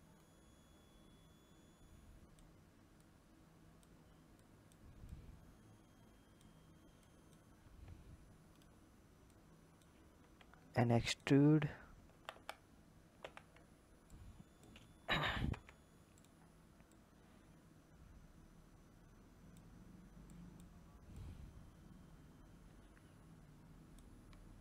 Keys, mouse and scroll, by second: 0.1 click, 2.9 click, 4.3 click, 5.0 click, 14.0 click, 16.8 click, 20.2 click, 21.0 click, 24.3-24.6 scroll up 4.